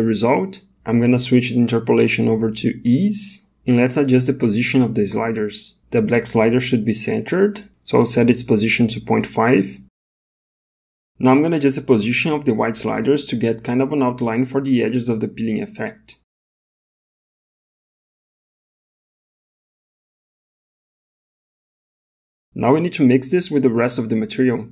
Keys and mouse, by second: 1.1-2.7 drag, 7.9-10.0 drag, 13.3 click, 18.2 ctrl+z, 18.2 click, 18.7 click, 21.2 click, 23.3 middle click, 24.1 middle click.